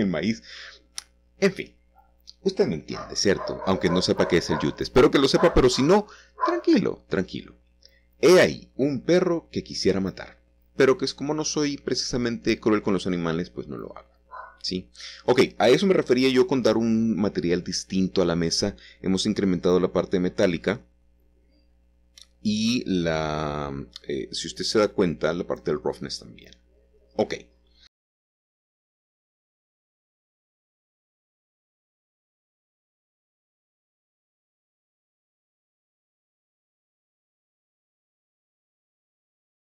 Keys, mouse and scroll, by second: 0.2 ctrl+middle click, 0.3-1.4 ctrl+middle drag, 2.4 shift+middle click, 3.1 s, 5.3 click, 5.7 Tab, 6.3-7.6 scroll down 3, 7.6 shift+middle click, 8.1 middle click, 8.7 shift+middle click, 9.5 shift+middle click, 9.8-10.4 scroll up 1, 10.5-11.7 middle drag, 12.1 shift+middle click, 12.9 click, 13.4 click, 16.5 click, 17.1 click, 17.9-19.0 drag, 21.5 click, 25.4-26.3 scroll down 1, 26.3-27.3 shift+middle drag, 27.5 scroll up 1, 28.2-28.7 scroll up 1, 30.0-32.1 ctrl+shift+middle drag, 33.0-37.4 drag, 37.2-38.2 scroll down 2, 38.7 middle click.